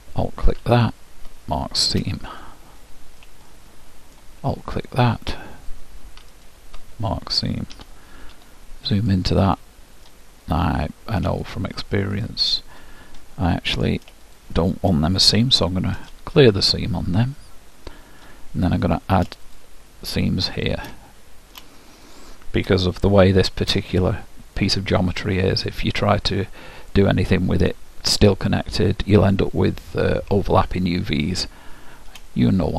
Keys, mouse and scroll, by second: 0.9-2.5 drag, 2.9 middle click, 3.5-5.4 middle drag, 6.4-8.2 drag, 8.4 KP_Decimal, 9.1-10.7 middle drag, 10.7-14.1 drag, 13.3-14.8 middle drag, 14.3-15.9 drag, 17.4-18.9 middle drag, 18.9-23.8 drag, 21.1-23.3 middle drag, 25.2-26.9 middle drag, 31.5-32.3 scroll up 1, 32.3-32.7 middle drag.